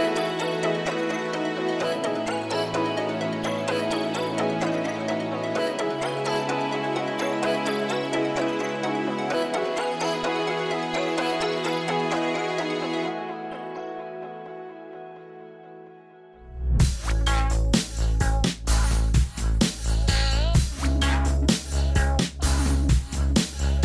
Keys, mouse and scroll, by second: 5.2 scroll down 1, 5.4-6.3 scroll up 1, 6.3-8.3 scroll down 1, 17.4 scroll up 1, 18.3-19.2 scroll up 1, 19.2 scroll down 1, 20.1 scroll up 1, 20.8 scroll down 1, 22.8 scroll up 1, 23.6 middle click.